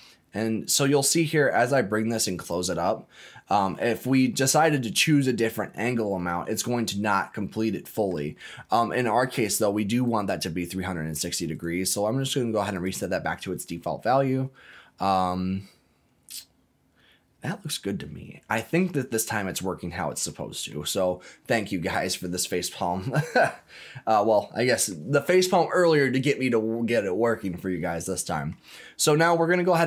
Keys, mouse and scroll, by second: 2.8 middle click, 3.9-5.8 scroll up 1, 6.0-6.3 scroll down 1, 6.3-8.1 middle drag, 10.0-11.2 drag, 11.5-12.8 right drag, 18.2-18.5 scroll down 1, 18.5 middle click, 19.7-20.2 scroll up 2, 20.2 middle click, 22.8 scroll down 1, 23.3-24.9 middle drag, 28.5 middle click.